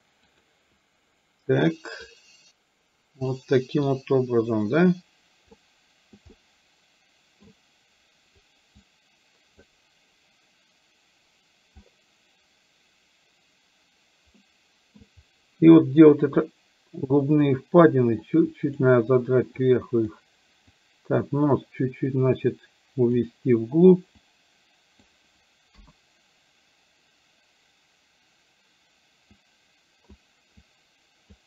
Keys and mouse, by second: 0.3 click, 2.2-3.3 drag, 3.9-5.6 drag, 6.4-7.6 middle drag, 8.8 click, 14.4 middle click, 16.4-17.4 drag, 18.3 click, 19.7 click, 20.8-23.2 drag, 24.3 click, 25.8 KP_1, 29.4 click, 30.7 click.